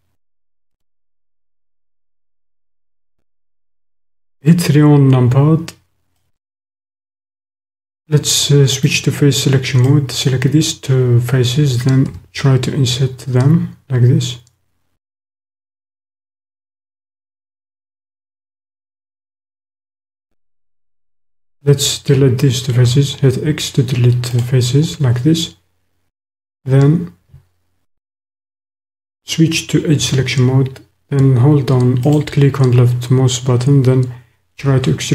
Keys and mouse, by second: 0.7 click, 2.0 click, 2.3-3.4 right drag, 4.1 KP_3, 6.2-7.3 drag, 8.8 click, 9.9 click, 17.4 click, 19.9 shift+middle click, 22.7 x, 29.2 click, 32.0 alt+click, 34.6 e.